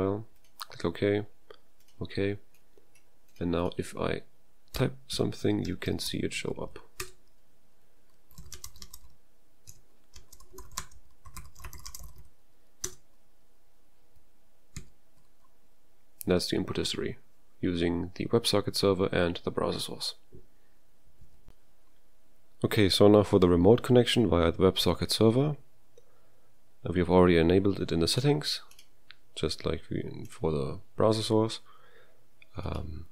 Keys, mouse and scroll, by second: 4.5-7.0 typing, 6.5 ctrl+a, 8.2-12.7 typing, 12.8 Return, 15.4 shift+s, 21.4 BackSpace.